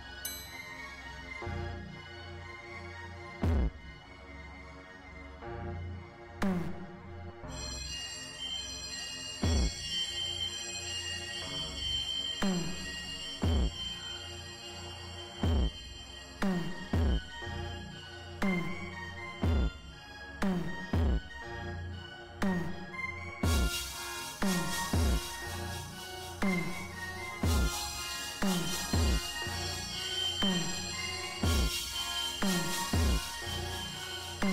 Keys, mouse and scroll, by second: 0.8 right click, 1.5 click, 4.4 click, 4.9 click, 11.1 click, 19.1 right click, 20.0 click, 20.3 middle click, 26.0 click, 27.5 click, 34.3 right click, 34.4 click.